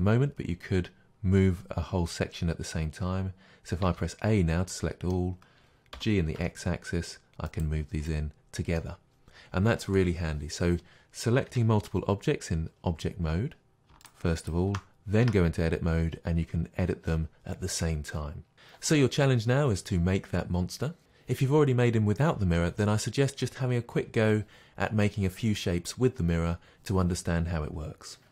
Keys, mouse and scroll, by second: 3.9 a, 6.0 g, 7.6 click, 8.1-13.7 middle drag, 11.5 Tab, 14.0-15.2 shift+drag, 15.2 Tab.